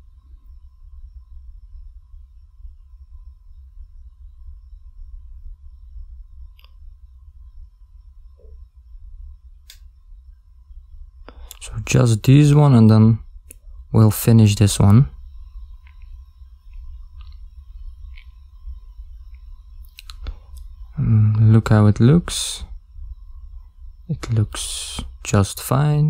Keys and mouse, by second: 1.1 ctrl+middle click, 2.5 a, 2.8 b, 5.3 g, 9.1 a, 9.3 b, 11.8 g, 16.2 ctrl+middle click, 16.9 shift+z, 17.6 ctrl+middle click, 18.4 middle click.